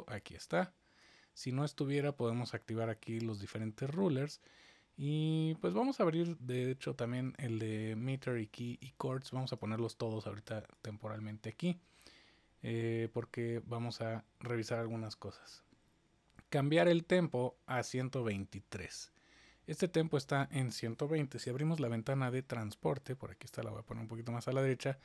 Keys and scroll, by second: 21.4 super+1.